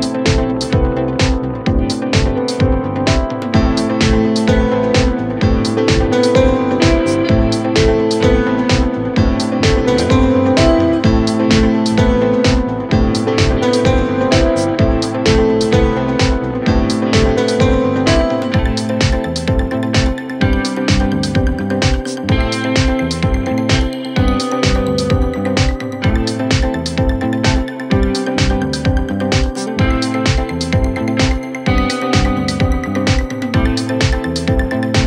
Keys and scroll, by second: 9.3 Escape, 9.5 ctrl+z.